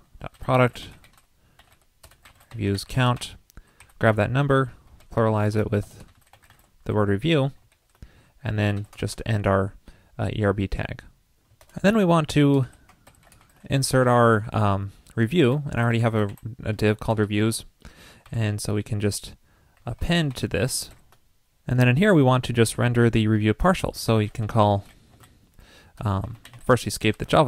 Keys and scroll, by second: 11.7 super+Return.